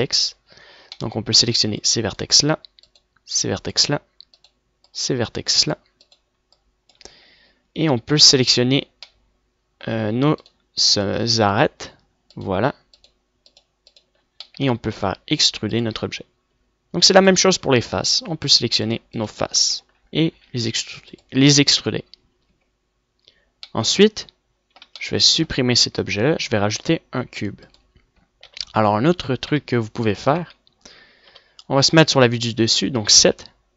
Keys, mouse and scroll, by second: 0.6 a, 2.6 middle click, 4.5 click, 9.4-10.9 drag, 10.9 middle click, 11.1 middle click, 12.1 middle click, 16.0 middle click, 16.1-16.5 middle drag, 16.5 e, 19.0 click, 19.1 a, 20.4 middle click, 21.9 e, 24.1 Tab, 27.2 x, 28.0 shift+a, 30.0 KP_1, 31.1 KP_5, 31.9 Tab, 32.7 KP_7.